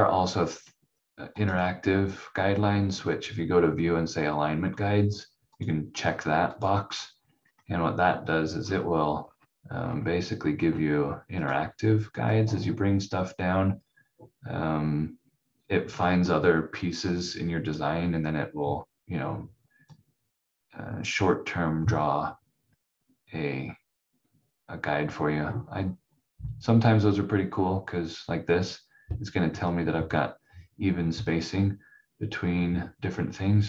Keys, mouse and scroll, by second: 5.5 click, 7.5-8.6 scroll up 1, 8.6 scroll down 1, 9.8 scroll up 1, 11.4 click.